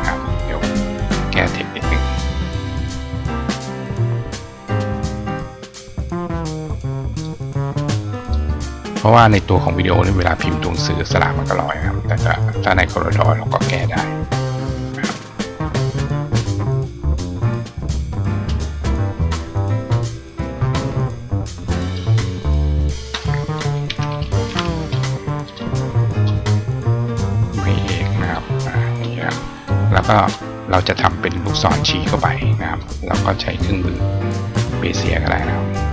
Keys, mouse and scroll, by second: 0.4 click, 2.6-5.2 drag, 6.6 click, 7.0 click, 8.2 click, 12.4-17.2 drag, 18.2 click, 19.3 click, 21.7 click, 22.8 click, 27.5 click, 28.7 click, 30.0 click, 32.7 click, 34.7 click.